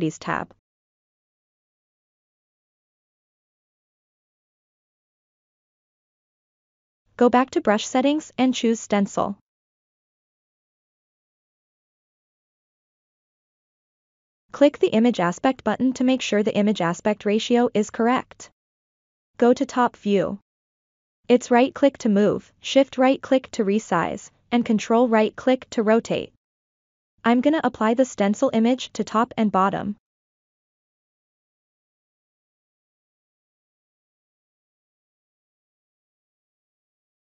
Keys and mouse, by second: 0.0 click, 0.8 click, 7.2-8.4 drag, 9.8 click, 11.6 click, 13.1-14.2 drag, 16.5 KP_7, 18.4 ctrl+middle click, 19.5 shift+middle click, 21.2 middle click, 22.6 KP_7, 25.0-26.5 right drag, 26.8-28.1 shift+right drag, 28.5-31.6 right drag, 33.6 f, 35.0-37.3 drag.